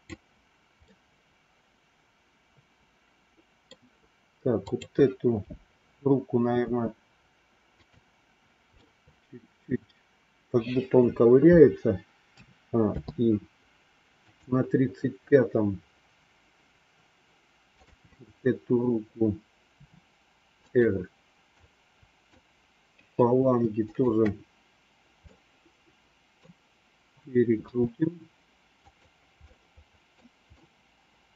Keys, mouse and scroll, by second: 0.8-3.8 middle drag, 4.5 click, 6.6 g, 8.7 scroll up 1, 9.0-11.0 middle drag, 12.4 a, 12.9 i, 14.1 click, 17.7 click, 19.7 r, 21.6 click, 23.9 shift+click, 25.1-26.5 middle drag, 27.5 r, 29.4 middle click, 30.5-31.3 middle drag.